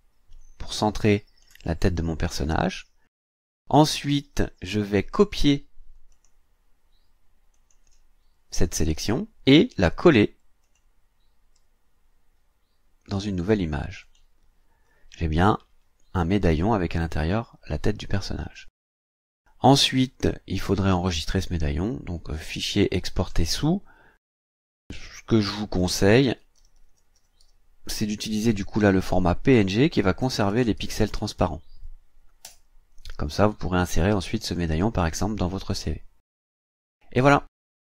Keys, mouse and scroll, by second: 6.1 click, 7.5 click, 10.6 click, 14.0 click, 15.3-15.6 ctrl+scroll up 2, 20.9 click, 23.0 click, 25.6-27.9 typing, 28.7 Right, 29.9-31.9 typing, 32.4 Return, 34.3 click.